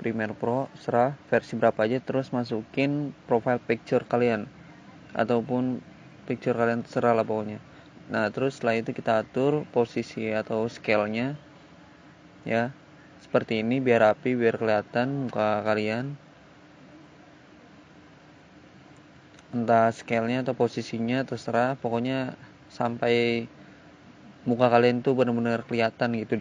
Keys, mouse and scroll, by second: 1.4 click, 3.0 click, 3.3 click, 3.4 double click, 5.2 double click, 8.7 click, 11.4 click, 11.6 click, 14.3 click, 16.1 click, 22.8 click, 23.6 click, 24.5 click, 25.6 click, 25.8 click, 26.3 click.